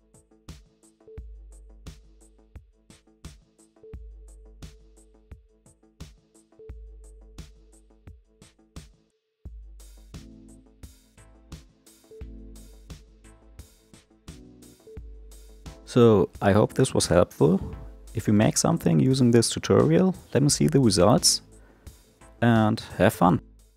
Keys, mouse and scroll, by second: 0.1-0.4 shift+middle drag, 0.4 scroll up 4, 0.6 shift+middle click, 0.9 shift+a, 1.1 ctrl+alt+KP_0, 1.2 click, 1.5 ctrl+z, 1.6 ctrl+z, 3.0 click, 3.1 g, 4.0 click, 4.3 click, 4.8 click, 5.8-8.1 drag, 8.6-10.5 drag, 11.3 click, 12.1 click, 12.5 space, 13.7-15.6 typing, 13.8-14.2 drag, 14.3 click, 15.4 click, 17.8 space, 20.4-22.7 drag.